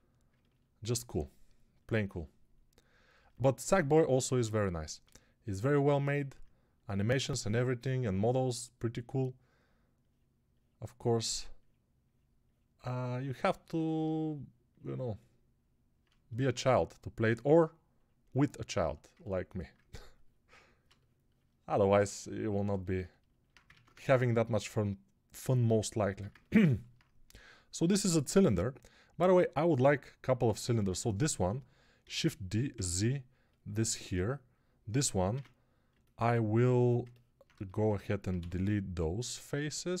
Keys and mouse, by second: 23.6 ctrl+Tab, 23.8 shift+a, 25.9 Tab, 30.7 Tab, 31.9 shift+d, 34.9-40.0 middle drag, 35.2 Tab, 36.5 3, 38.2 x.